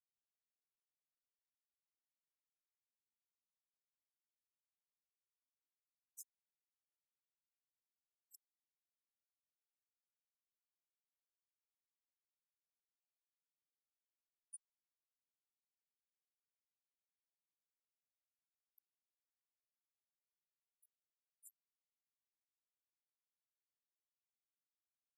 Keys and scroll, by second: 22.3 ctrl+shift+Right.